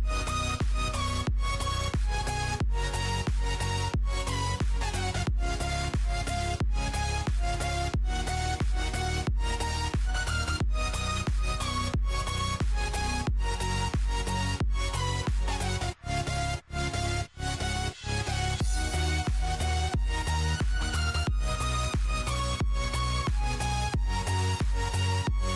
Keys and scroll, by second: 0.3-1.2 typing, 2.6-3.5 typing, 4.9-7.4 typing, 8.6-9.5 typing, 10.8-11.7 typing, 16.9-20.7 typing, 21.8-22.9 typing.